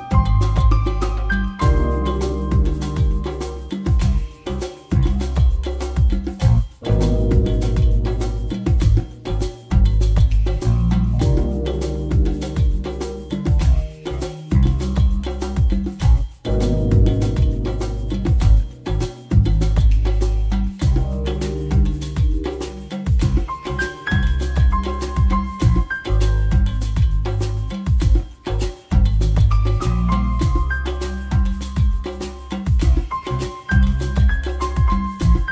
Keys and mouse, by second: 0.1-1.5 typing, 3.6-4.7 typing, 6.4-7.6 typing, 12.7-14.2 drag, 16.5-19.7 drag, 18.6 g, 21.6 a, 23.9 e, 29.3-30.7 drag, 33.8 a, 33.8 b, 33.8 g.